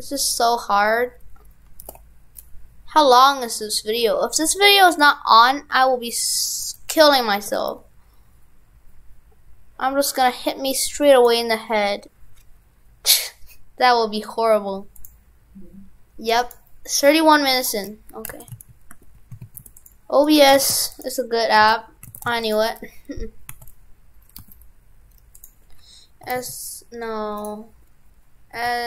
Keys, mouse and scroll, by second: 18.3 shift+f, 20.3 right click, 20.6 shift+f, 21.6 shift+f, 22.2 shift+f.